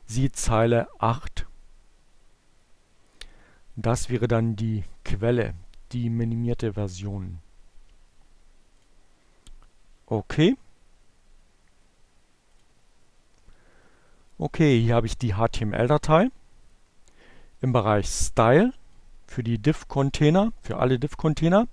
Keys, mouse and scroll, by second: 2.9 click, 10.7 click, 16.9-18.1 drag.